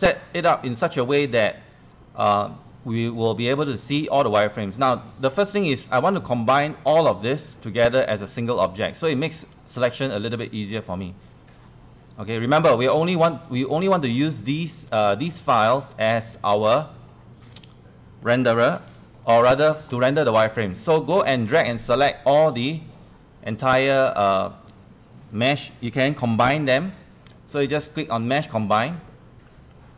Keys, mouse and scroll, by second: 9.0-18.2 drag, 19.2 ctrl+click, 27.7 click.